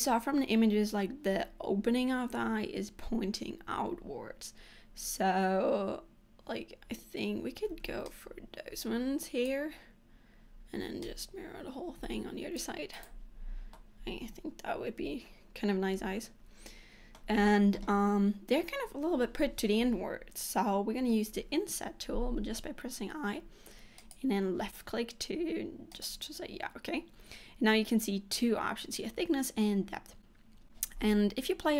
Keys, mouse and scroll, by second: 7.8 c, 13.5-13.8 scroll down 3, 13.8 middle click, 26.0 click, 26.1 click, 31.1-31.5 scroll up 4.